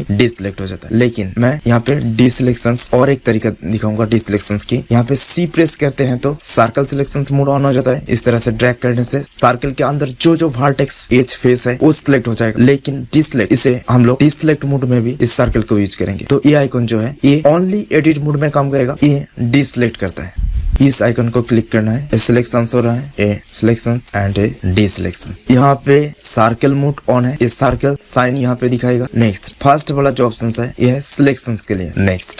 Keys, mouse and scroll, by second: 1.8 alt+a, 2.7 a, 16.3-17.6 drag, 19.0-20.6 drag, 21.2 click, 23.0-25.3 drag, 26.4-27.5 drag, 30.5-31.8 drag, 31.9-32.3 drag.